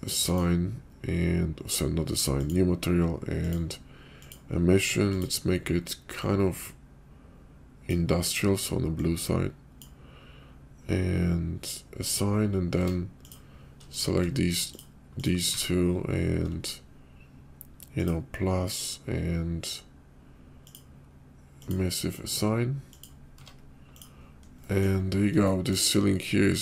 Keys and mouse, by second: 0.2 click, 2.3 click, 3.4-4.2 drag, 5.1 click, 9.1 click, 12.7 Tab, 13.3 click, 14.7 click, 15.2 click, 15.5 Tab, 17.9 click, 20.7-21.7 drag, 23.4 Tab, 24.0 click, 24.7 click, 25.5 shift+right drag.